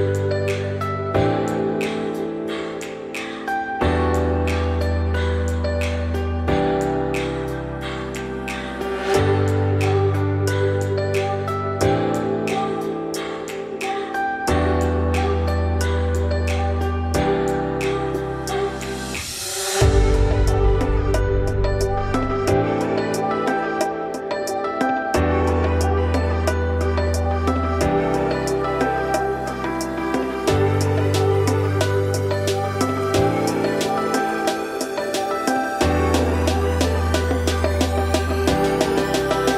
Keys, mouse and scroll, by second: 0.6 scroll down 1, 0.7-1.8 middle drag, 1.8-2.2 scroll down 7, 2.2-6.2 middle drag, 6.2 click, 6.6 Tab, 8.0 shift+s, 8.3 Tab, 9.2 shift+a, 11.8 Tab, 12.1 `, 13.2 `, 13.9 shift+middle click, 14.2-15.2 scroll up 3, 15.2 r, 17.4 scroll up 2, 17.6 s, 23.1 scroll down 3, 23.2 middle click, 23.7-24.2 scroll up 4, 24.2 f, 26.9 scroll down 1, 27.1 z, 28.2 `, 28.5 z, 29.1 `, 29.7 z, 30.2 click, 31.1-34.5 typing, 32.0 scroll down 3, 32.2 middle click, 32.8 scroll up 1, 33.0 middle click, 34.9 middle click, 35.4 Tab, 35.5 scroll up 3, 36.0-36.6 middle drag, 36.6 shift+d, 38.1 shift+click, 39.1 ctrl+KP_Subtract.